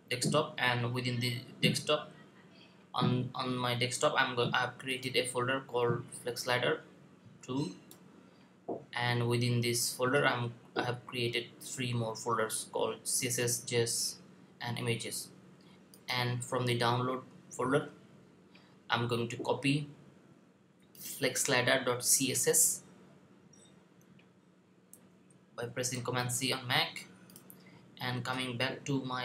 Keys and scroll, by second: 24.8 super+c.